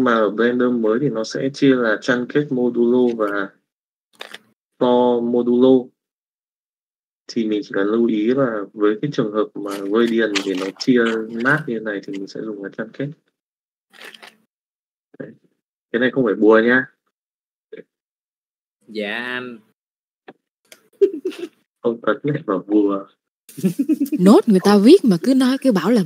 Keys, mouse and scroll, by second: 0.0-1.3 drag, 6.8-13.8 drag, 14.9 middle click, 15.9 click, 16.8 middle click, 17.6 click, 21.7 shift+middle click.